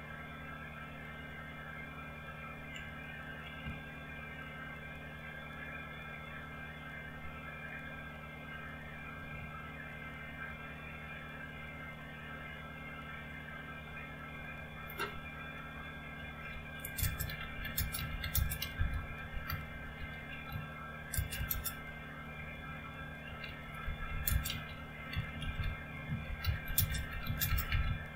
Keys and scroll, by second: 4.6 alt+Tab, 10.6 alt+Tab, 12.5 alt+Tab, 16.2-21.4 typing, 22.8-28.1 typing.